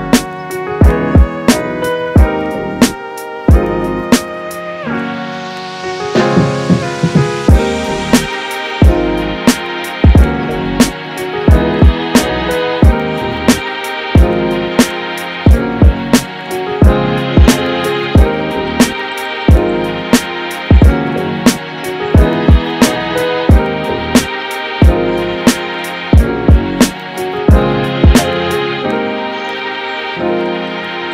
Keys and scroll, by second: 3.1 space, 15.3 space, 17.7 space, 22.6 space, 24.5 space, 29.8 super+s.